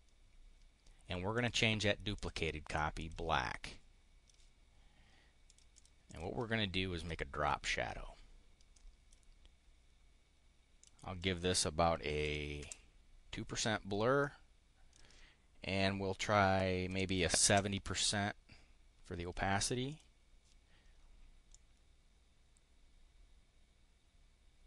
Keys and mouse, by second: 1.3 click, 2.1 click, 3.0 click, 3.5 click, 5.4 click, 5.7 click, 5.9 click, 8.7 click, 10.7 click, 12.2 2, 12.5 Return, 14.1 click, 16.8 7, 17.1 0, 19.8 click, 21.3-24.6 drag.